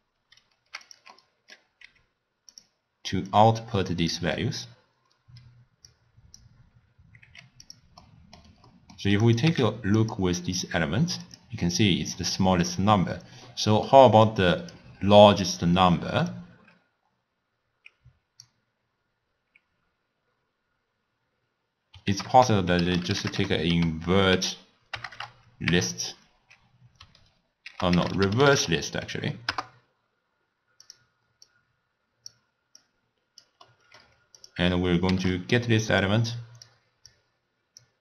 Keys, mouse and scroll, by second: 1.2 middle click, 1.9 g, 3.3 drag, 7.3 g, 8.1-9.3 middle drag, 9.3 click, 9.5 w, 13.5-14.3 middle drag, 14.3 click, 15.4 click, 16.4 click, 22.2 ctrl+a, 25.2 BackSpace, 31.5 drag, 32.9 click, 33.7-34.4 middle drag, 34.4 click, 35.4 shift+d, 36.4 click, 37.1-38.0 drag.